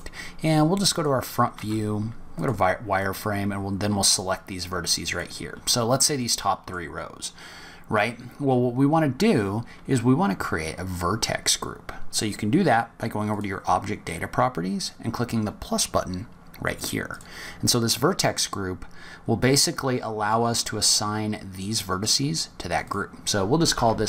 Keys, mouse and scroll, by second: 0.9 click, 1.5 z, 2.9 click, 6.0 middle click, 7.0-7.6 scroll up 5, 13.1 click, 16.9 click, 22.6 click, 22.8 click.